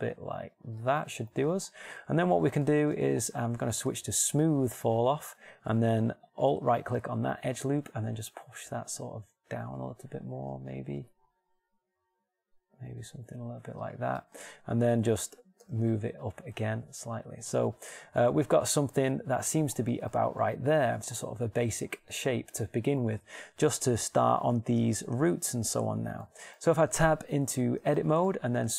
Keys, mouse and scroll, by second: 2.2 shift+middle click, 7.1-8.9 middle drag, 8.3 g, 15.5 shift+Tab, 15.9 g, 27.9 Tab.